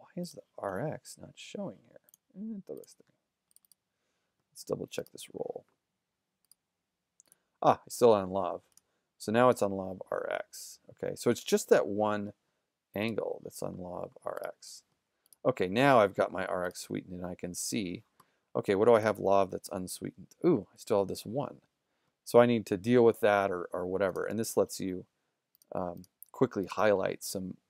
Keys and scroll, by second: 16.8 shift+z.